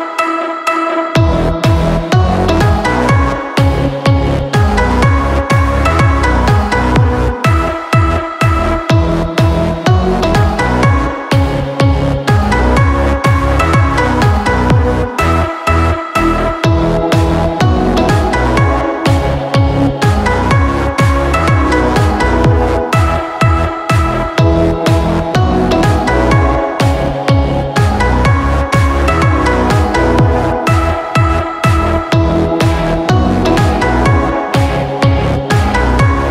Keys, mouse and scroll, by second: 0.1-0.7 middle drag, 0.7 scroll down 1, 0.9-1.3 scroll up 1, 1.3 click, 1.6-2.3 scroll up 1, 2.3-5.0 drag, 5.0-5.7 scroll down 5, 5.7-9.6 drag, 15.1-17.1 drag, 18.0 click, 18.7 KP_5, 19.7-20.2 scroll up 7, 20.2-21.0 middle drag, 21.0 KP_3, 21.7-22.2 scroll down 10, 22.2-23.2 middle drag, 23.2-23.6 scroll up 4, 23.6-24.1 shift+middle drag, 24.1-24.5 scroll up 3, 24.5-28.7 middle drag, 30.4 Tab, 30.7 click, 31.6 3, 32.1 click, 32.4 scroll down 2, 32.6 middle click, 33.5 e.